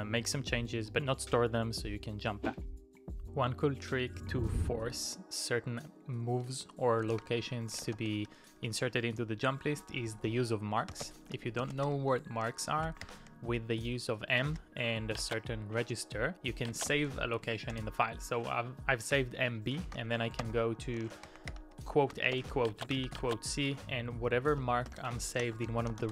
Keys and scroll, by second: 7.1 ctrl+w, 7.9 ctrl+w, 8.9-13.6 typing, 16.9 ctrl+o, 17.7 ctrl+i, 20.0-23.2 typing, 24.6-26.1 typing.